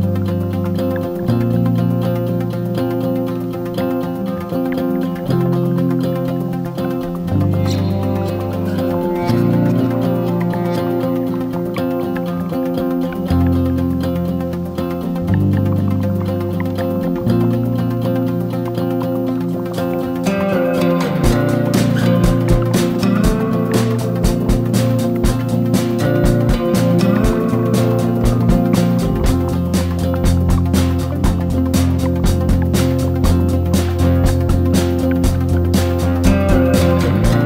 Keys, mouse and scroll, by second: 12.6-22.6 drag, 24.6-26.0 drag, 26.5 shift+click, 27.2 click, 34.5 shift+click, 35.0-37.4 drag.